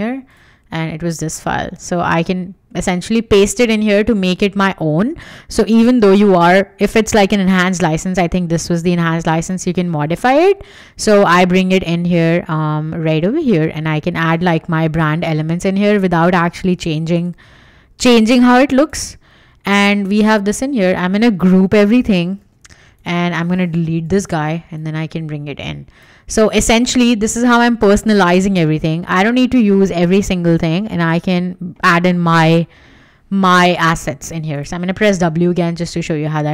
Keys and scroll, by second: 2.1 super+v, 22.3 super+g, 24.0 BackSpace, 27.0 w, 33.3 w.